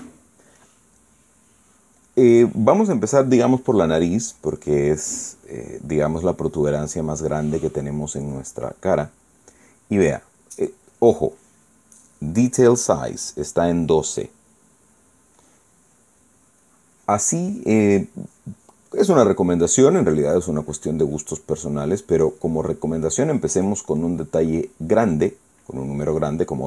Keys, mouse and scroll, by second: 0.1 shift+middle click, 6.2 click, 6.7-10.3 drag, 17.3 click, 17.9 click, 18.1-20.4 drag, 22.5 click, 25.2 middle click, 25.6 scroll up 1.